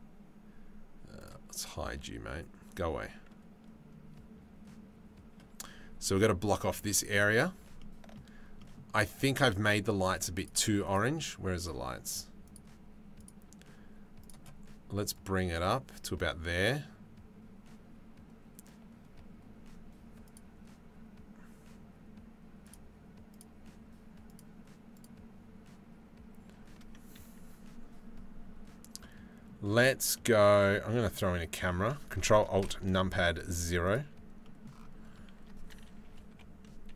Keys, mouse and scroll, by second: 0.9 click, 7.4 shift+right click, 8.3 click, 10.5 click, 13.9 click, 19.9 click, 28.7 click, 29.8 middle click, 32.4 ctrl+alt+KP_0, 34.0 click, 35.9 KP_7, 36.8 z.